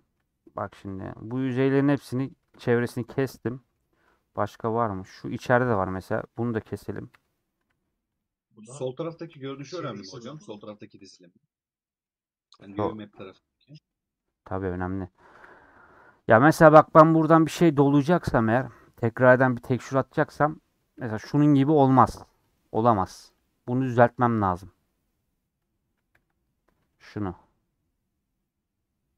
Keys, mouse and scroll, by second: 3.3 scroll up 1, 3.4 middle click, 3.8 scroll up 1, 4.0-5.3 middle drag, 5.3 3, 7.2 ;, 7.6 2, 8.6 scroll down 2, 8.8-10.3 middle drag, 10.3 a, 12.8-14.4 middle drag, 14.4-15.6 scroll up 3, 21.0 typing, 21.1-22.6 drag, 24.2 click.